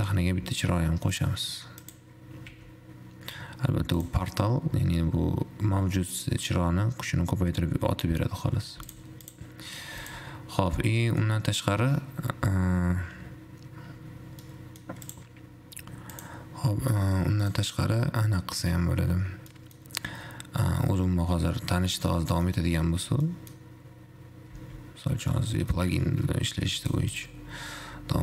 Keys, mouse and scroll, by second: 0.1 shift+a, 3.0 r, 6.5-9.0 middle drag, 9.0 x, 9.5 click, 10.3 x, 11.0-14.0 middle drag, 14.6-15.5 middle drag, 15.5 click, 16.3 click, 17.6 click, 19.7 middle click, 20.2-22.1 scroll up 1, 22.1-24.7 middle drag, 24.7 z, 25.4 scroll down 2, 25.5-27.0 middle drag, 27.0 click.